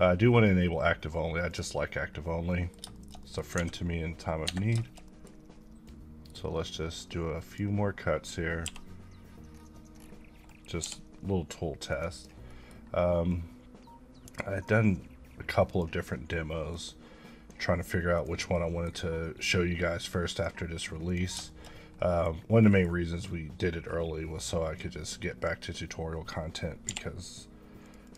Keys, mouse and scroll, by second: 0.0 click, 2.5 middle click, 2.9 shift+middle click, 3.5-4.4 scroll up 1, 4.4 Escape, 5.8 click, 8.6 b, 9.5 scroll down 1, 10.8 t, 11.9 click, 12.1 double click, 12.4 middle click, 13.3 click, 17.0 click, 18.4 scroll up 1, 18.5 middle click, 19.4 click, 21.5 shift+middle click, 21.7 scroll down 1, 22.0 middle click, 22.3 scroll up 1, 22.6 middle click, 23.3-24.8 drag, 26.8 t, 27.8 click, 28.0 double click.